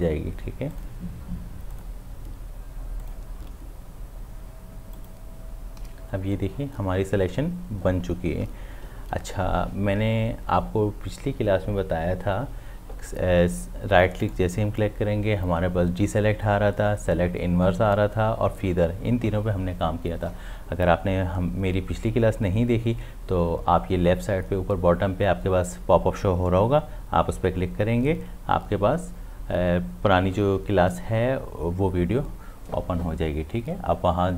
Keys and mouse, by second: 14.2 right click.